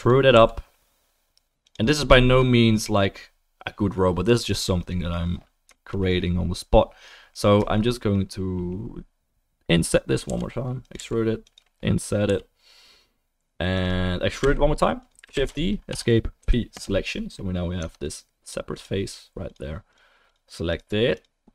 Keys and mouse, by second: 0.3 e, 2.4-10.9 middle drag, 10.3 i, 10.9 e, 11.4-15.9 right drag, 12.3 i, 14.4 e, 15.3 shift+d, 15.9-18.3 middle drag, 16.4 p, 17.8 Tab, 18.0 click, 18.3 right click, 18.7 middle click, 18.8 right click, 19.0 middle click, 19.1 right click.